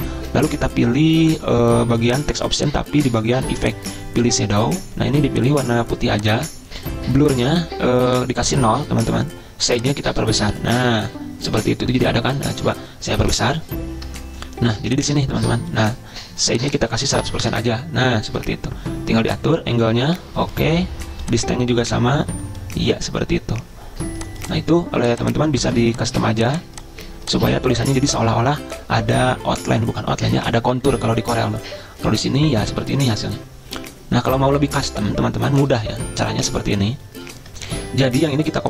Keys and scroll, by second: 17.1-18.0 typing.